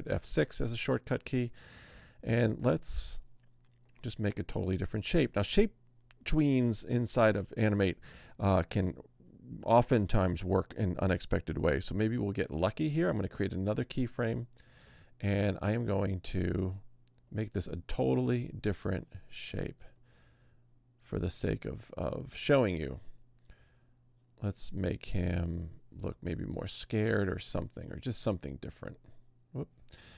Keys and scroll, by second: 12.5 F6.